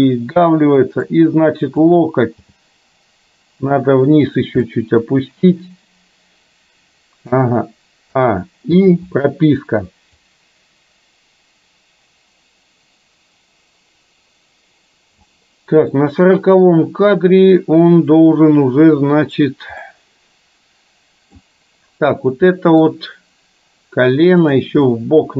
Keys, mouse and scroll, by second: 2.5 g, 4.7-7.5 middle drag, 8.2 a, 8.9 i, 10.4-15.2 drag, 16.0-19.5 middle drag, 19.9-21.5 middle drag, 22.6-23.0 middle drag, 24.5 drag, 25.0-25.3 middle drag.